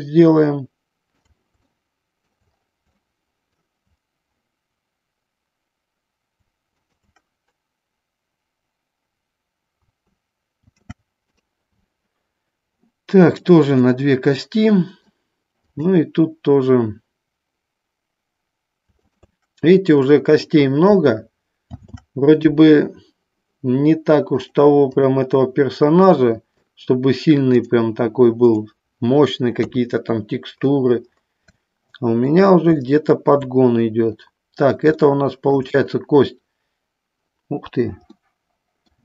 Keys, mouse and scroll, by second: 1.6 shift+middle click, 3.1 shift+middle click, 6.9-9.5 shift+drag, 10.7 ctrl+shift+c, 13.9 click, 14.6 middle click, 15.9-18.5 drag, 19.1-21.6 shift+drag, 21.7 ctrl+shift+c, 24.6 click, 25.1 click, 26.3 middle click, 27.7 click, 29.8 KP_3, 31.6 shift+middle click, 33.0 shift+middle click, 35.3 shift+middle click, 38.3 middle click.